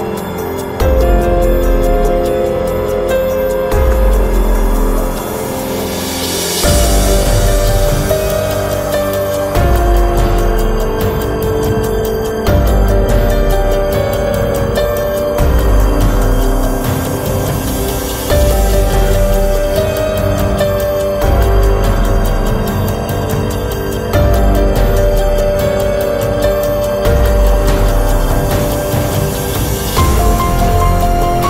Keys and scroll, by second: 5.3 Escape, 6.8 ctrl+a, 22.0 Escape, 22.7 Escape.